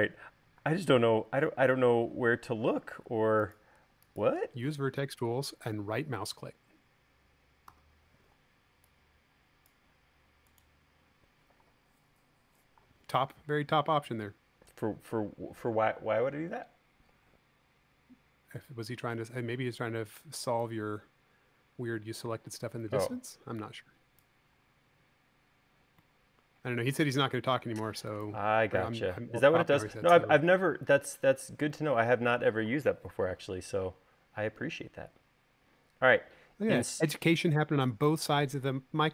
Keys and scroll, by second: 0.7 space, 7.9 v, 28.1 space.